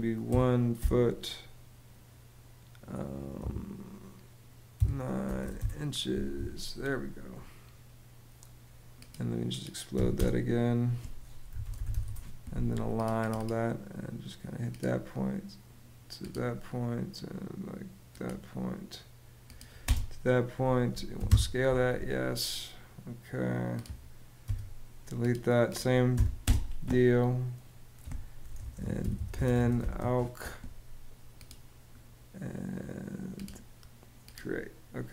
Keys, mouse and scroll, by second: 0.4 ', 3.1 -, 4.4 9, 5.1 ', 5.2 Return, 5.8 ↺, 6.3 ↺, 6.5 Escape, 9.6-12.1 typing, 19.5 space, 20.8 y, 20.9 Home, 24.1 BackSpace, 25.8 b, 26.1 space, 28.0-30.1 typing.